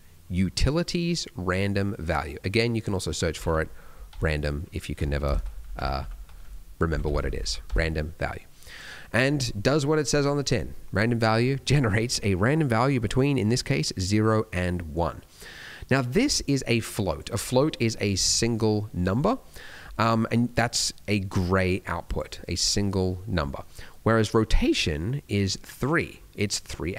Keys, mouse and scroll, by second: 5.3 BackSpace, 7.0 Up, 7.1 Up, 7.6 Up, 11.8-15.0 scroll up 3, 15.0 middle click, 15.4-16.2 scroll down 1, 16.2 click, 19.7 middle click, 20.7 click, 23.4 middle click.